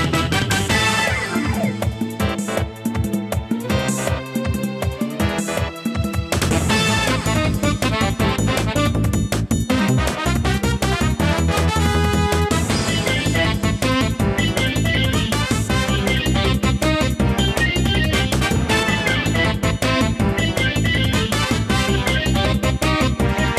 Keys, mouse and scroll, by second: 0.1 click, 0.7 shift+a, 1.6 click, 2.5 scroll down 1, 4.3 scroll down 1, 4.4-5.4 scroll up 1, 5.4 click.